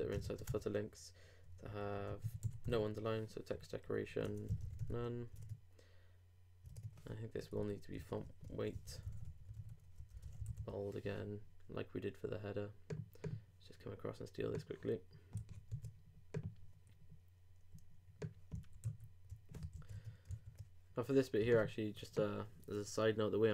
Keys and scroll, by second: 0.2 shift+space, 0.3 shift+[, 0.5 shift+Return, 5.3 super+;, 5.4 super+Tab, 6.7 super+Tab, 7.4 super+Up, 8.2 super+Up, 8.5 super+Return, 15.7 super+w, 18.8 super+s, 19.8 super+Left, 20.3 super+s.